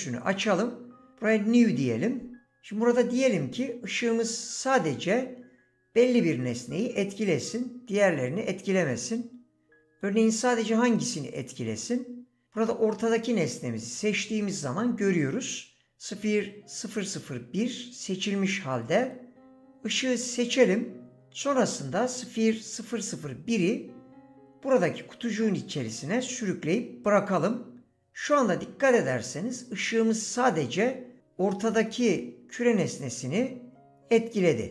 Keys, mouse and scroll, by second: 20.4 click, 22.7 click.